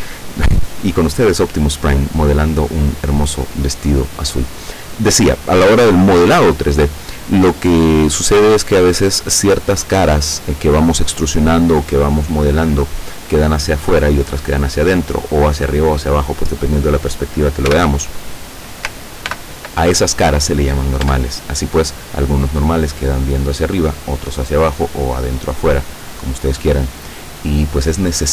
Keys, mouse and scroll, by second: 17.7 l, 19.3 ctrl+n, 21.1 Tab, 26.0-26.5 scroll down 2, 26.6 scroll down 2.